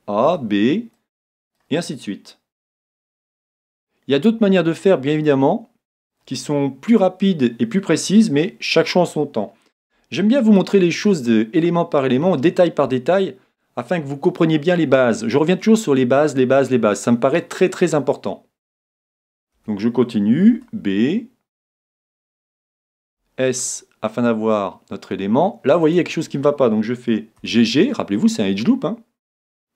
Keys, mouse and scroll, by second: 0.0 middle click, 0.3 b, 2.7 s, 6.1-7.8 drag, 8.0 click, 19.6 a, 20.5 b, 23.1 s, 25.9-27.7 drag, 27.4 g.